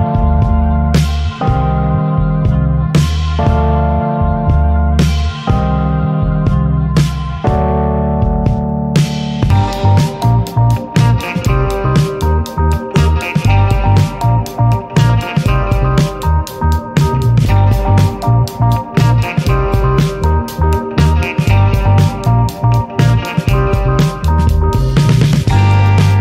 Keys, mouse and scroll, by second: 1.6-2.1 middle drag, 4.0-6.0 drag, 6.4 scroll down 1, 6.6-7.8 middle drag, 7.8 click, 8.7-10.7 middle drag, 10.7-13.4 drag, 13.4 shift+middle click, 13.4 ctrl+s, 13.6-14.1 scroll up 3, 14.1 click, 14.3 alt+middle click, 14.9 shift+d, 15.6-16.3 shift+middle drag, 16.3-17.3 drag, 19.1-20.5 alt+middle drag, 20.5 s, 22.6 click, 22.9-23.6 middle drag, 24.3 alt+middle click, 24.6-25.8 shift+middle drag, 25.8-26.1 drag.